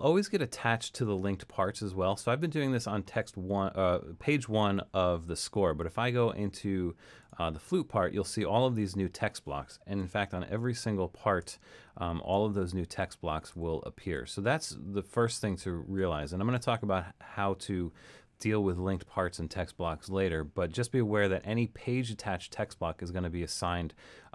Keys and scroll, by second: 10.2 alt+super+., 11.4 alt+super+., 12.3 alt+super+., 13.0 alt+super+,, 13.5 alt+super+,, 14.2 alt+super+,, 15.6 alt+super+,.